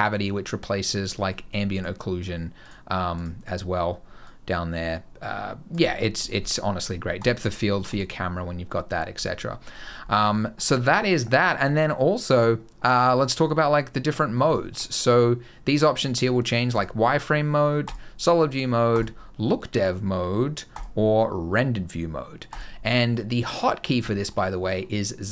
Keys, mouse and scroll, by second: 1.6 click, 2.5 click, 3.0 click, 9.3 middle click, 9.6 scroll down 3, 9.9 middle click, 10.1 scroll up 2, 10.3 middle click, 11.0 click, 13.9 middle click, 14.4 shift+middle click, 16.6 click, 17.7 click, 18.8 click, 20.6 click, 22.4 click, 23.9 shift+middle click, 24.3 scroll down 1, 24.3 middle click, 25.2 z.